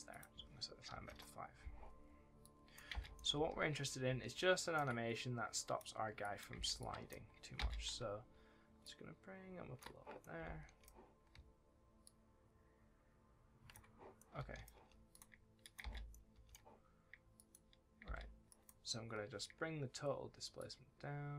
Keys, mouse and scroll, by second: 0.0 click, 0.8 KP_5, 1.0 KP_Enter, 2.3 click, 2.8-4.7 typing, 3.1 right click, 5.5 click, 6.5 space, 6.7 click, 7.5 space, 10.1 right click, 10.3 a, 14.1 right click, 14.3 a, 15.0 click, 15.7 space, 16.0 right click, 16.3 w, 17.3 click, 18.0 space, 18.4 click, 19.0-19.4 shift+scroll up 1, 20.5 shift+click.